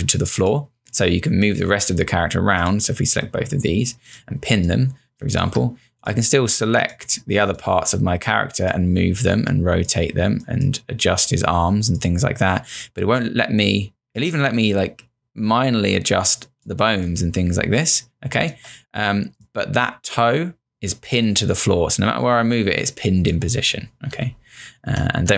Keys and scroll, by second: 4.5 space, 16.9 space, 24.3 ctrl+z.